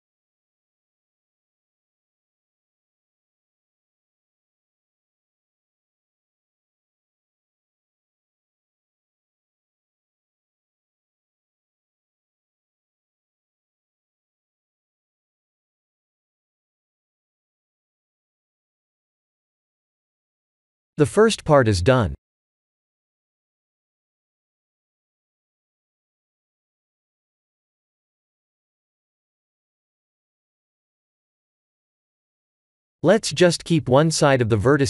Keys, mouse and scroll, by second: 1.6 click, 2.0 middle click, 4.3-4.9 ctrl+z, 5.2 ctrl+z, 7.0 click, 7.5 g, 10.2 click, 11.6 click, 14.3 x, 15.4 middle click, 17.0-17.4 scroll up 5, 17.6 middle click, 19.8 scroll down 2, 20.1 middle click, 23.5 shift+z, 29.3 KP_1, 33.6 Tab, 34.1 click, 34.5 Tab.